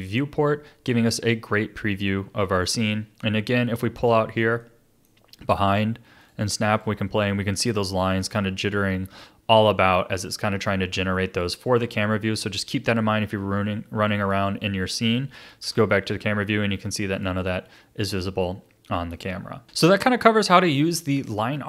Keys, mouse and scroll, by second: 3.2-6.2 middle drag, 6.2-9.7 drag, 11.5-15.5 drag, 15.6 KP_0, 17.1 click.